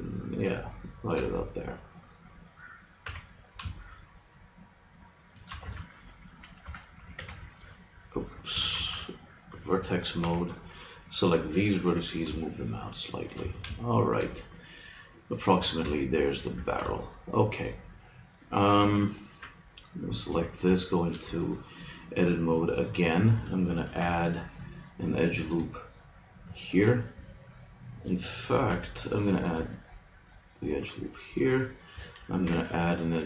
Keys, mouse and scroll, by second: 1.0-2.1 drag, 3.1 g, 5.7 Tab, 6.6 a, 7.1 b, 8.7 ctrl+Tab, 10.2 b, 11.9 g, 13.3-14.7 drag, 13.4 a, 15.5 Tab, 16.5 a, 19.9 right click, 20.3 Tab, 23.9 ctrl+r, 28.7 g, 31.3-32.8 drag, 32.4 ctrl+r.